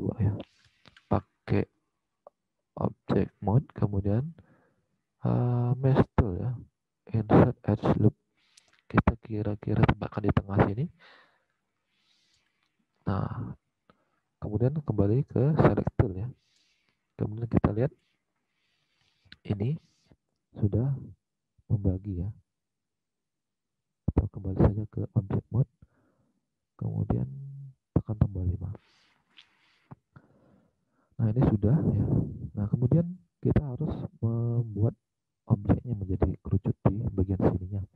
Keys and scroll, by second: 0.5 alt+Tab, 35.1 alt+Tab, 37.8 alt+Tab.